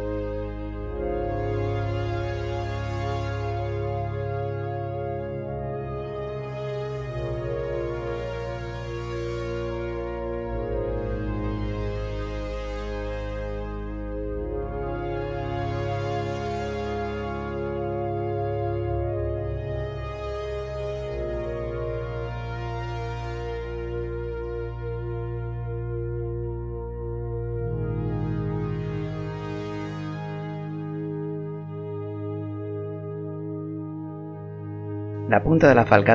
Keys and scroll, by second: 3.7 g, 6.9 s, 7.1 z, 13.6 r, 21.9 e, 24.7 e, 34.4 g.